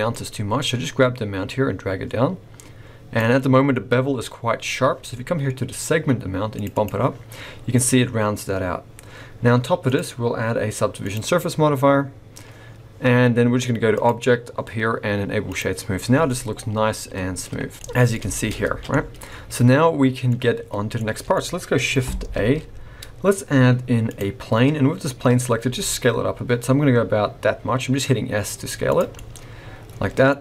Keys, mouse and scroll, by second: 0.1 click, 3.7 scroll up 3, 6.5 click, 6.7 click, 7.3-8.8 scroll down 2, 9.9 click, 12.6-13.9 scroll down 3, 13.9 click, 15.9-16.2 scroll down 4, 16.2 middle click, 17.6-17.9 scroll down 2, 17.7 middle click, 18.2 shift+middle click, 18.5 scroll up 2, 18.6 alt+a, 18.9 middle click, 21.0 middle click, 22.3 shift+a, 24.4-25.4 scroll down 4, 25.7 s, 29.2 middle click, 30.3-30.4 scroll up 4.